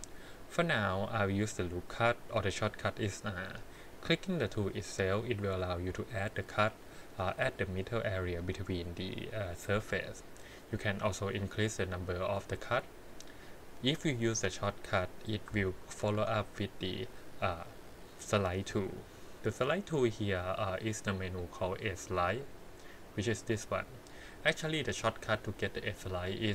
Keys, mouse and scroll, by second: 3.6 click, 5.8 click, 7.2 click, 8.2 click, 14.2 click, 16.0 ctrl+r, 21.2 click.